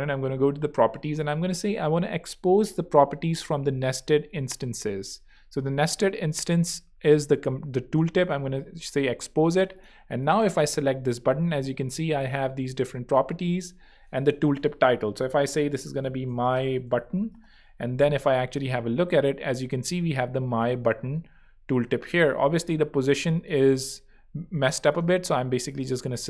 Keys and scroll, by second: 15.1-17.7 typing, 22.3 super+2.